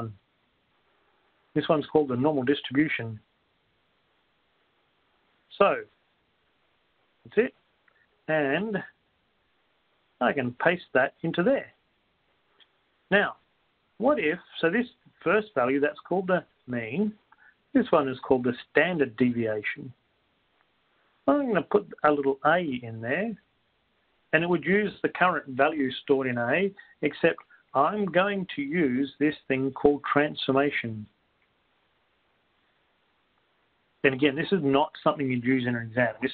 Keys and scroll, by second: 8.8 Down, 8.8 Up, 8.8 1, 12.0 Return, 12.0 5, 12.9 Return, 14.1 Left, 18.3 Right, 30.3 Up, 32.3 Down, 32.3 Return, 32.3 Left, 32.3 Right.